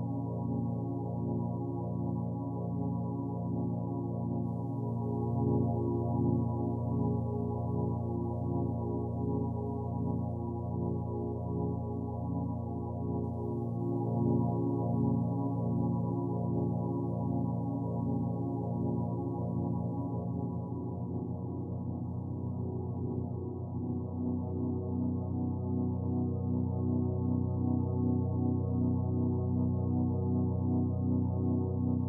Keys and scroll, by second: 2.6 shift+space, 6.8 space, 17.3 ctrl+alt+z, 27.0 ctrl+z.